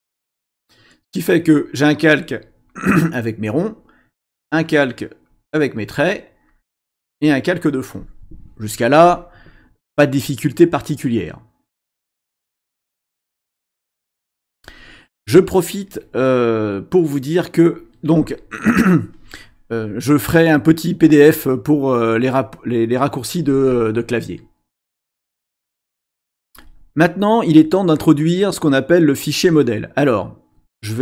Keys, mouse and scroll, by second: 1.4 click, 2.1 click, 2.7 click, 3.5 click, 4.2 click, 4.8 click, 5.3 click, 5.9 click, 6.5 click.